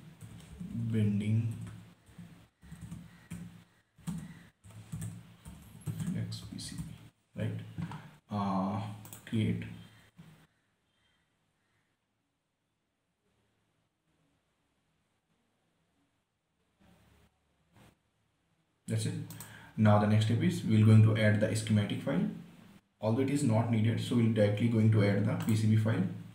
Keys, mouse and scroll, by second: 0.0-1.3 typing, 3.0 n, 3.2 space, 5.2-7.6 typing, 9.4 click, 19.6 right click, 25.8 click.